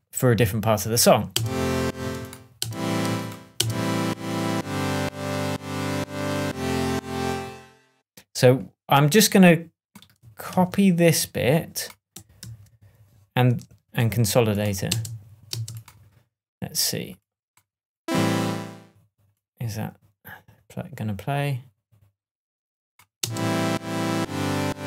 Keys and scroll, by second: 1.3 space, 7.1 space, 10.4 super+c, 12.4 super+v, 13.9 super+j, 14.8 super+space, 23.1 space.